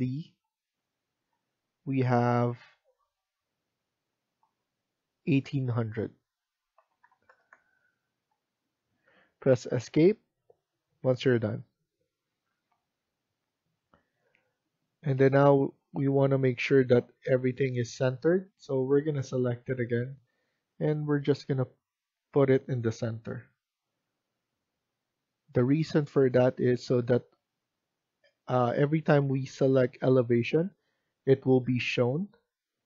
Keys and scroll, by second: 6.4-7.7 typing, 8.1 Return, 10.1 Escape, 10.3 typing, 10.9 Escape, 11.5-13.0 typing.